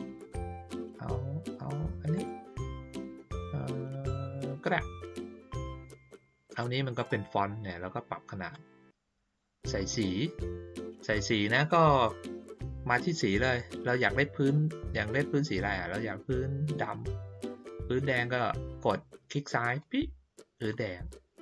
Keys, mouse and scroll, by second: 0.7 scroll up 1, 2.1 click, 6.6 click, 8.5-9.3 drag, 19.6 click.